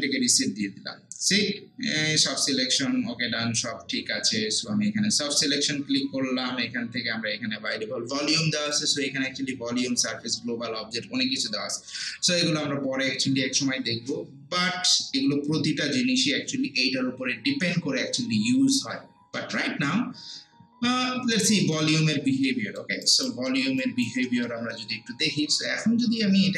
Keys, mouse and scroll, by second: 8.7 click, 21.7 click, 22.5 alt+middle click, 23.1 alt+right click, 23.5 alt+middle click, 23.8 alt+right click, 24.3 alt+middle click.